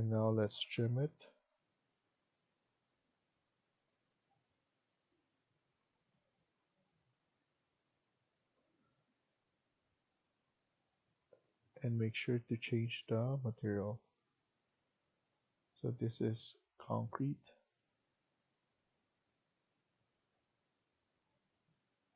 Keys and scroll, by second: 0.3-1.1 typing.